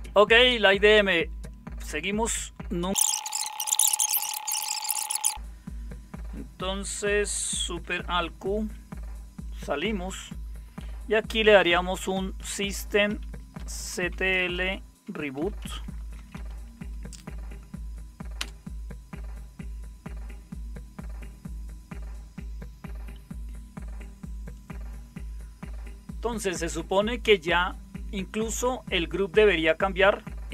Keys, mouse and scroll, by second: 3.2-4.0 typing, 8.4 alt+super+q, 11.2-16.8 typing, 18.3 Return.